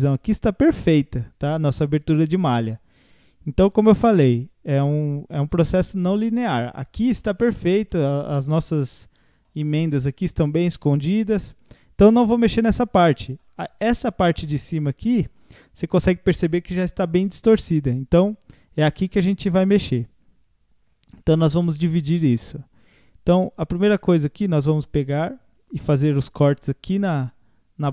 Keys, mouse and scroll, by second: 0.8-3.8 middle drag, 7.9-8.3 middle drag, 8.3-8.6 scroll up 1, 8.6-9.5 middle drag, 9.5 scroll down 1, 9.9-12.0 middle drag, 12.0 scroll up 1, 12.5-13.0 scroll down 1, 13.0-17.8 shift+middle drag, 18.2 Tab, 19.4 click, 20.5-20.8 scroll down 5, 21.1-22.4 shift+middle drag, 22.4 scroll up 1, 23.9 alt+click, 25.6 alt+shift+click, 26.6 alt+shift+click, 27.4 scroll up 3.